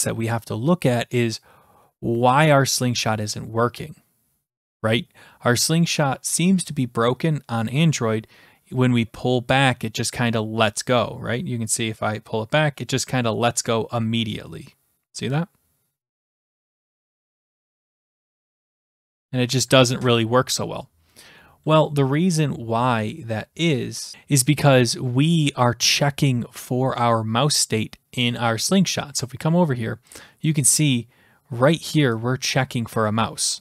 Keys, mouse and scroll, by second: 28.3 click, 30.4 click, 30.8-31.4 scroll down 3, 31.6 scroll.